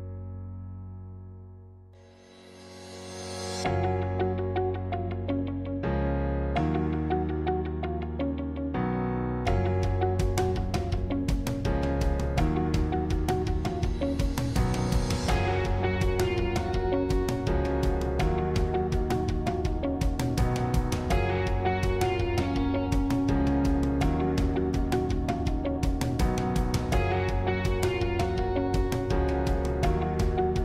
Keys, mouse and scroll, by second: 0.9-2.2 middle drag, 2.2 click, 4.8 middle click, 5.4 scroll up 4, 6.0-7.8 middle drag, 7.8 shift+click, 8.2 scroll down 2, 8.4-12.1 middle drag, 12.1 shift+click, 12.6-17.7 middle drag, 17.7 click, 18.5 s, 23.5 g, 26.3-30.6 middle drag.